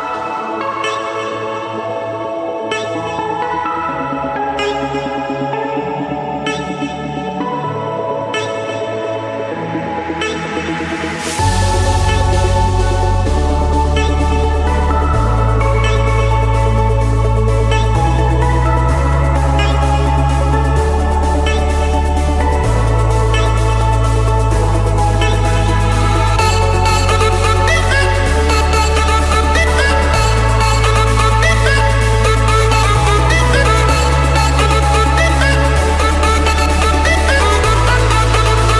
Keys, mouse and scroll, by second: 1.6 click, 2.2 Return, 4.5-5.6 drag, 7.3-8.6 typing, 9.5 Return, 11.5 click, 11.9 Return, 13.3-14.4 drag, 16.0-17.1 drag, 17.4 Return, 21.5-22.6 drag, 23.5-24.7 middle drag, 28.1 click, 29.6-30.7 drag, 32.4-33.6 drag, 34.8-35.9 drag, 37.8 click, 38.5 click.